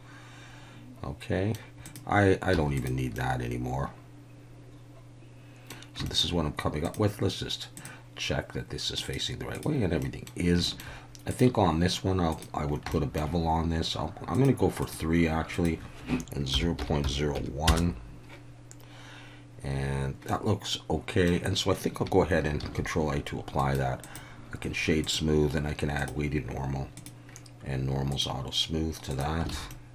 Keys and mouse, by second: 3.2-5.7 middle drag, 3.2 x, 6.1 shift+middle drag, 7.9-9.8 drag, 10.0 middle drag, 10.7 shift+middle click, 11.4-12.4 drag, 12.9-13.2 shift+middle drag, 14.3 click, 14.8 click, 15.5-18.2 drag, 20.3-21.3 middle drag, 22.6 ctrl+a, 25.0-26.1 drag, 26.9 click, 28.1 click, 29.1 click, 29.5 alt+a, 29.7-29.9 middle drag.